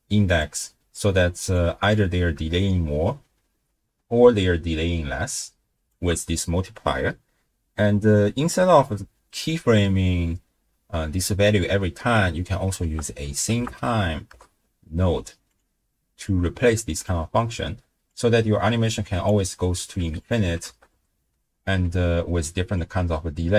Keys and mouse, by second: 1.5 click, 2.6-5.9 shift+drag, 11.8 middle click, 12.8 ctrl+a, 16.3-17.0 drag, 18.2-19.3 drag, 19.8 click, 20.0 x, 20.2 click, 20.7 shift+space, 21.9 space, 22.8-23.5 drag.